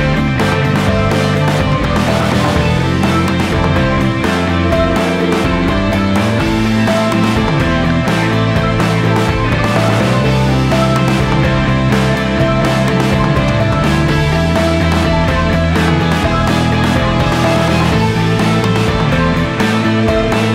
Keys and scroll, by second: 2.0 ctrl+z, 2.1 v, 3.3-5.8 typing, 4.2 ctrl+s, 7.3 2, 7.4 Return, 7.5 ctrl+z, 8.4-11.3 typing, 12.6-13.7 typing, 13.2 ctrl+s.